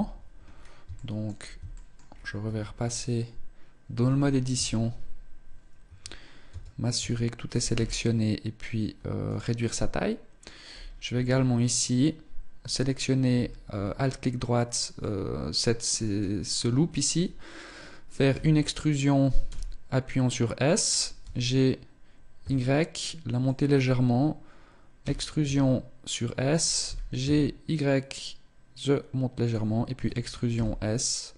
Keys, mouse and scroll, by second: 0.3-0.6 scroll down 4, 0.7 shift+middle click, 1.5 shift+middle click, 1.9-2.2 scroll up 1, 2.2 Tab, 2.6-3.1 scroll up 2, 3.9 z, 3.9 s, 6.3 a, 6.8 a, 7.2 s, 9.5 middle click, 10.5 scroll up 3, 11.5 alt+right click, 12.5 alt+right click, 13.5 scroll up 1, 14.8 middle click, 18.1 e, 21.0 g, 24.8 e, 26.7 g, 29.3 click, 29.7 e.